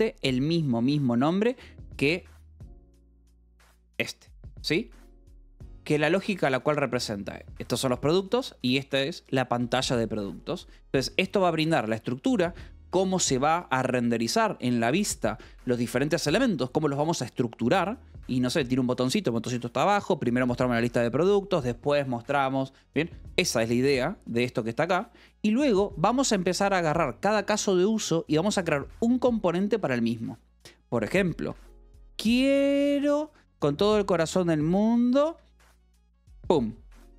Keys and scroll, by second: 0.0-4.9 typing, 6.1 Escape, 7.0 j, 7.2 k, 8.1 Escape, 8.2 j, 9.1 shift+v, 9.7 Escape, 10.4-11.7 typing, 25.1 v, 25.2 Escape, 25.7 j, 26.1 h, 28.8 v, 29.4 e, 31.3 Escape, 35.8 v, 36.1 b.